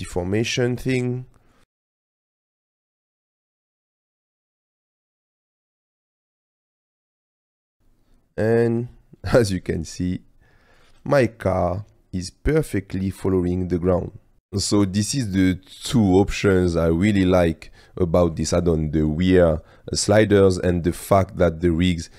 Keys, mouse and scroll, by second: 0.4 Tab, 1.5 middle click, 2.2 click, 2.8 click, 3.1 ctrl+z, 3.2 click, 3.9 space, 4.1-4.8 drag, 4.1 space, 5.6 click, 6.1-6.7 drag, 7.1 click, 7.8 space, 9.7 space, 10.3-10.9 drag, 10.9 space, 13.9 space, 21.0 click.